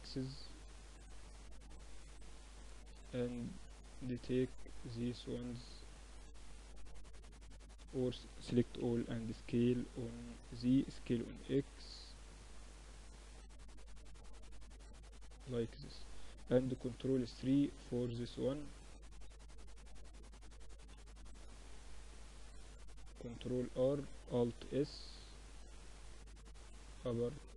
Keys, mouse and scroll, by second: 1.5 z, 2.1 a, 3.0 b, 4.5-6.3 drag, 6.4 ctrl+z, 6.7 a, 6.9 a, 7.7 s, 9.9 s, 10.9 Tab, 11.5-13.3 drag, 14.1 z, 14.8-16.5 drag, 15.9 ctrl+3, 16.7 middle click, 17.9 Tab, 19.3 ctrl+r, 21.6 ctrl+r, 23.5 alt+s.